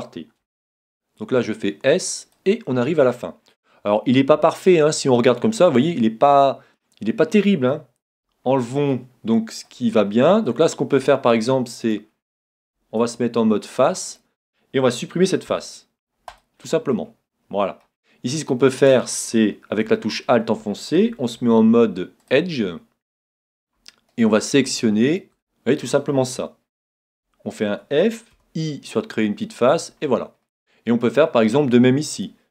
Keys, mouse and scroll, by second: 0.7 s, 2.3-4.0 drag, 3.2-6.7 middle drag, 8.1 z, 8.6-11.8 middle drag, 11.8-13.7 right drag, 13.0 ctrl+Tab, 14.1-15.9 right drag, 15.5 x, 16.9-18.7 middle drag, 16.9 x, 21.4 ctrl+Tab, 24.1-27.1 right drag, 27.2 f, 28.4 i, 29.6-31.3 drag, 30.0-32.5 middle drag, 32.1-32.5 right drag.